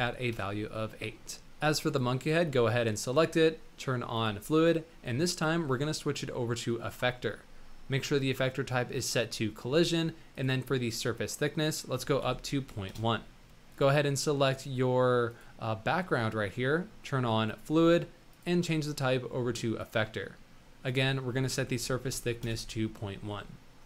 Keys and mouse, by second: 1.8 click, 5.3-7.0 drag, 10.3-12.9 drag, 13.7 click, 14.6 click, 17.4 click, 18.4-19.8 drag, 20.8-22.4 drag.